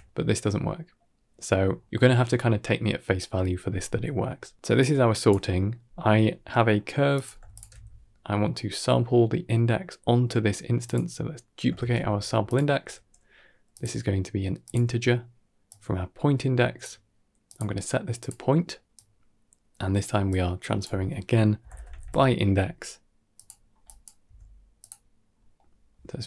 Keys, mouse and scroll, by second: 0.5 ctrl+shift+click, 2.5 middle click, 4.8-5.2 drag, 5.2 middle click, 6.4 middle click, 7.0 click, 7.4 alt+shift+click, 8.4 middle click, 9.9 middle click, 10.7 click, 13.6-14.6 drag, 25.0 typing.